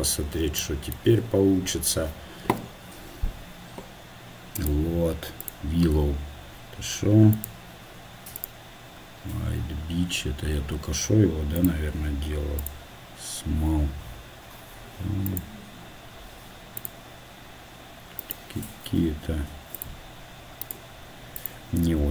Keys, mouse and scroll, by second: 0.2 z, 2.4 t, 6.2-17.3 drag, 6.2 t.